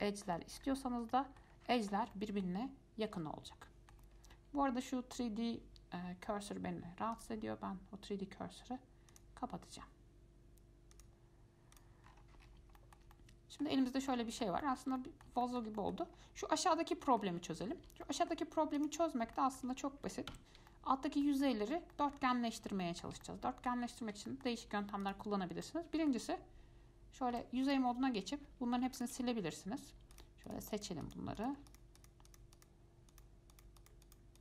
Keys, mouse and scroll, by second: 0.8-1.2 scroll up 4, 1.3-1.7 shift+middle drag, 1.7 shift+scroll down 1, 1.9-2.3 scroll up 3, 2.3 middle click, 3.2-3.8 scroll down 5, 3.8-4.3 shift+middle drag, 4.3-5.0 scroll down 2, 7.3 click, 9.3-12.0 drag, 12.2-13.0 scroll down 9, 13.0-14.0 shift+middle drag, 14.0 scroll up 4, 14.3-16.3 middle drag, 16.3-17.0 scroll down 2, 17.1-19.0 shift+middle drag, 19.0 click, 19.3-19.6 scroll up 2, 19.6-20.6 shift+middle drag, 20.6 Tab, 20.9 middle click, 21.7 scroll down 2, 22.1 middle click, 22.5-23.0 scroll up 3, 23.0-24.1 shift+middle drag, 24.1 scroll up 1, 24.5-25.2 shift+middle drag, 25.2 click, 25.8-27.6 middle drag, 27.6 3, 27.8 click, 29.1 alt+click, 30.3 shift+click, 30.7 shift+click, 30.9 shift+click, 31.2 shift+click, 31.6 shift+click, 31.9 shift+click, 32.2 shift+click, 32.5 shift+click, 32.7 shift+click, 33.3 shift+click, 33.7 shift+click, 34.0 shift+click, 34.2 shift+click.